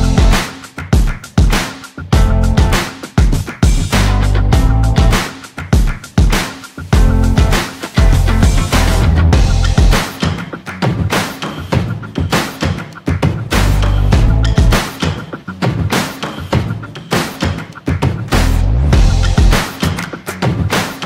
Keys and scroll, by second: 9.3 ctrl+z, 11.6 ctrl+c, 12.5 ctrl+v.